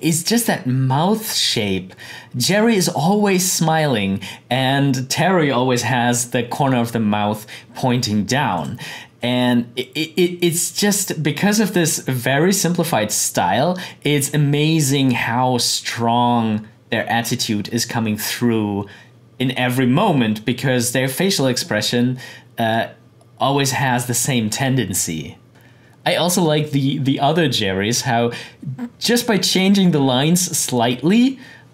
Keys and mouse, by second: 8.5-14.2 drag.